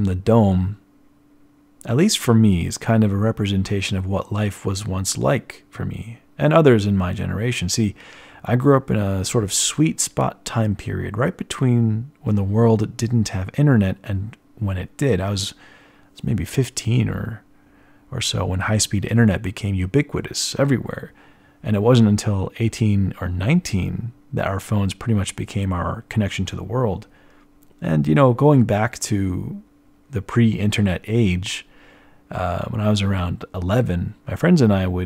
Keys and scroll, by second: 5.7 d, 6.5 d, 6.7 ctrl+alt+1, 6.8 b, 20.6 z.